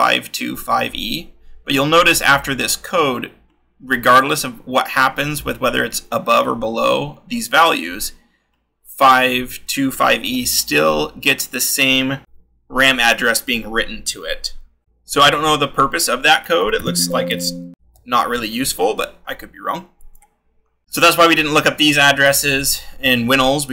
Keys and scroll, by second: 10.2 l, 12.2 shift+-, 14.6-18.6 typing, 20.8-21.8 scroll.